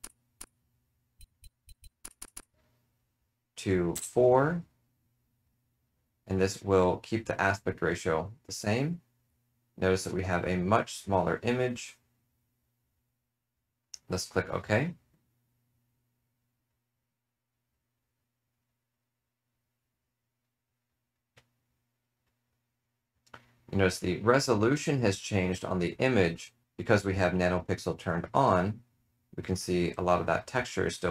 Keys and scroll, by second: 0.3 BackSpace, 1.1 Right, 1.3 Right, 1.6 Right, 1.7 Right, 2.0 BackSpace, 2.1 BackSpace, 2.3 BackSpace, 3.9 4.